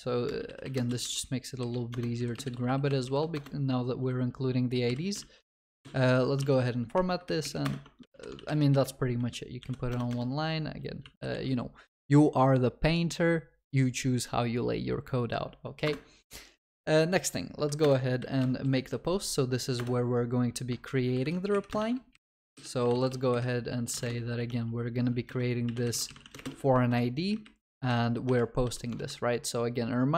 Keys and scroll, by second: 3.4 Return, 8.1 ctrl+s, 8.1 ctrl+alt+shift+l, 15.9 Return.